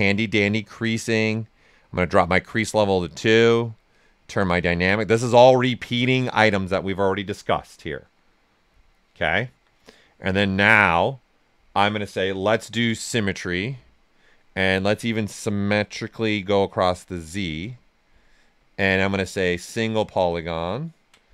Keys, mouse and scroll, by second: 3.9-5.2 drag, 5.2 right click, 5.9 ctrl+right click, 6.3 right click, 8.8 alt+right click, 9.9-12.3 ctrl+right drag, 15.1 click, 18.8 space, 19.9 right click.